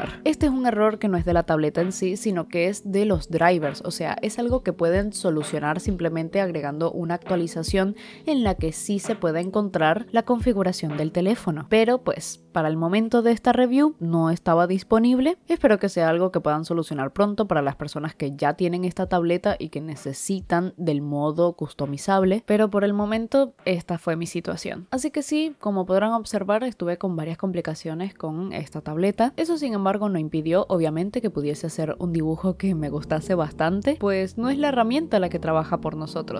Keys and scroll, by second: 0.0 i, 1.4 space, 2.4 u, 3.1 ], 5.0-11.4 typing, 13.8 ], 14.0 ctrl+z, 15.7-18.2 typing, 16.8 ctrl+z, 19.2 [, 19.7 ctrl+z, 19.8 ctrl+z, 20.0 [, 20.2 ctrl+z, 20.8 ctrl+z, 21.3 i, 21.5 space, 22.9 ctrl+z, 23.3 ctrl+z, 23.5 ctrl+z, 23.7 ctrl+z, 24.3-28.4 typing, 25.2 ctrl+z, 29.1 ctrl+z, 29.4-32.2 typing, 33.5-36.3 typing, 33.7 ctrl+z, 35.6 ctrl+z, 35.8 ctrl+y.